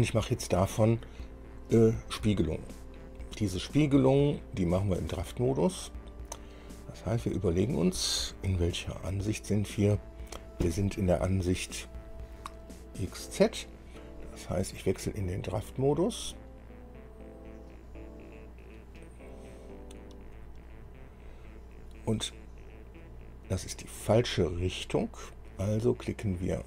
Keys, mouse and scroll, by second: 6.0 scroll down 1, 7.0-9.2 drag, 9.3 KP_1, 15.0 click, 18.0 click, 21.2-21.8 scroll down 2, 22.0-22.5 scroll up 4, 24.8-25.2 scroll up 2.